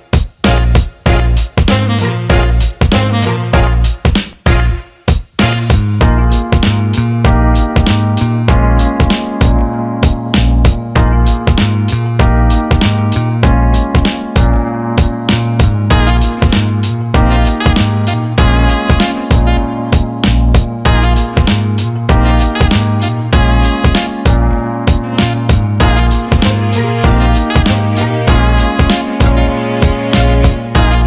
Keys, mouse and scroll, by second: 1.1-1.4 alt+middle drag, 2.0-3.5 drag, 3.6 alt+middle drag, 4.7 drag, 5.8 shift+a, 10.4 click, 12.0-13.9 drag, 14.0 shift+a, 17.7 click, 18.4-20.5 drag, 20.9-22.2 drag, 22.9-24.7 drag, 25.2-27.1 drag, 28.1 alt+middle click, 29.9 alt+middle click.